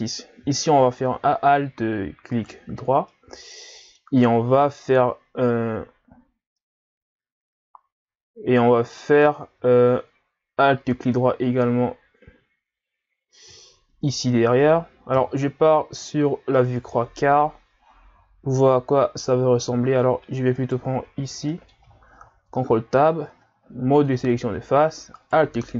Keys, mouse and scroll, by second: 2.4 alt+right click, 3.1-6.1 middle drag, 6.6-9.6 middle drag, 14.1 alt+shift+right click, 15.2 KP_1, 16.0-16.6 scroll down 1, 16.6-19.6 middle drag, 20.6 alt+right click, 21.5 middle click, 22.3 ctrl+Tab, 25.2 alt+right click.